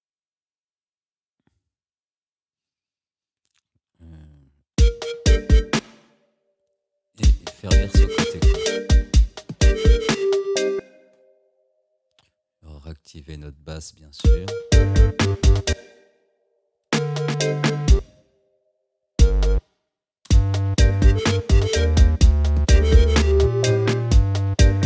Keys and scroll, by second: 4.8 space, 7.2 space, 10.8 space, 14.3 space, 15.7 space.